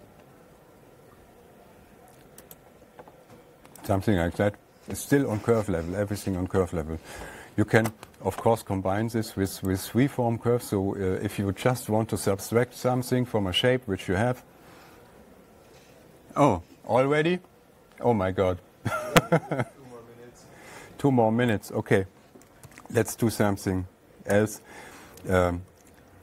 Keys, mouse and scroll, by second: 3.1 click, 4.4 click, 10.1 click, 22.2 click, 23.1 alt+Tab, 24.8 Page_Down, 25.6 Page_Down, 26.0 Page_Down.